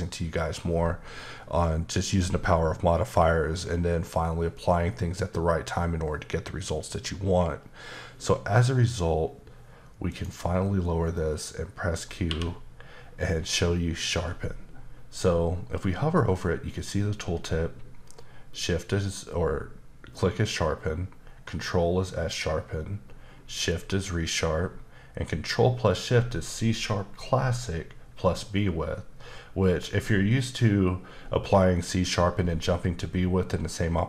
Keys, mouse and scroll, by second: 10.1 click, 11.1 middle click, 12.2 q.